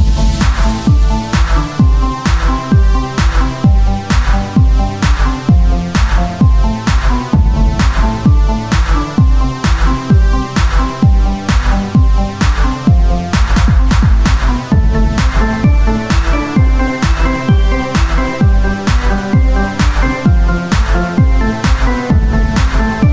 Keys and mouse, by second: 2.3 e, 2.6 r, 4.8 click, 5.0 e, 6.3-7.4 drag, 7.3 r, 8.3 e, 9.7-12.9 drag, 12.1 r, 12.9 e, 14.2-16.7 drag, 16.7 r, 17.9 click, 18.7 e, 21.1-22.3 drag, 22.9 a.